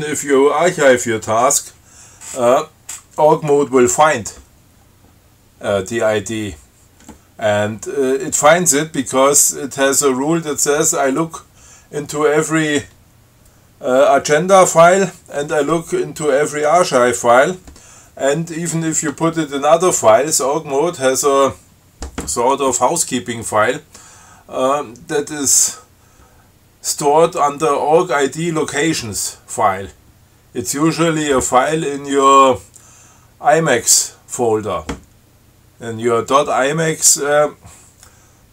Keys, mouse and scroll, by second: 10.5 scroll up 2.